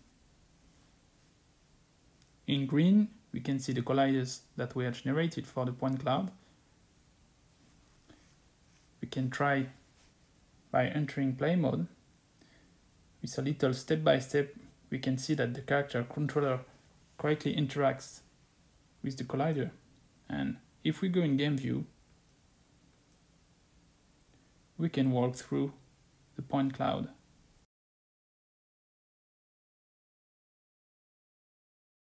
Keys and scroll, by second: 24.9 w, 25.4 w, 25.8 w, 27.6-32.0 typing.